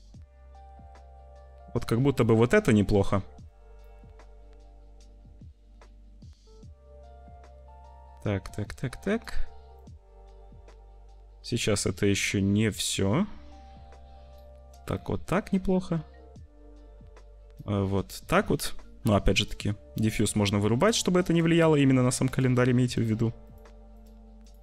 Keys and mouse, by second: 1.8 click, 3.9-5.1 drag, 8.6 middle click, 9.8-11.5 middle drag, 11.5-14.4 drag, 15.0-17.6 drag, 19.3 click, 20.7 click, 21.2 click, 22.2 click, 22.9 click, 23.4 click, 23.9 click, 24.3 click.